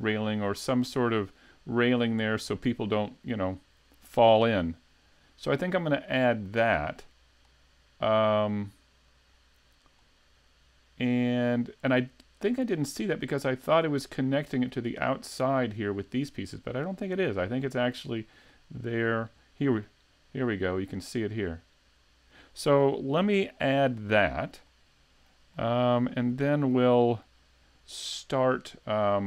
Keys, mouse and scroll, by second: 1.1 middle click, 6.6 middle click, 9.4-9.9 scroll down 3, 10.0-12.6 scroll up 3, 17.6 middle click, 18.5 middle click, 19.4 middle click, 24.7 middle click, 25.6 shift+middle click, 26.1-26.5 scroll up 3, 26.4 shift+middle click, 27.0 middle click.